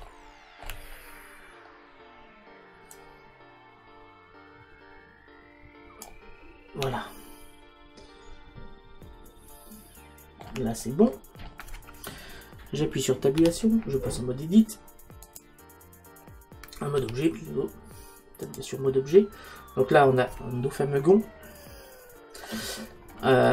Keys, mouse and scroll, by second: 3.0 click, 7.0-8.8 middle drag, 10.8-13.4 middle drag, 13.4 Tab, 17.0 Tab, 19.2-23.5 middle drag.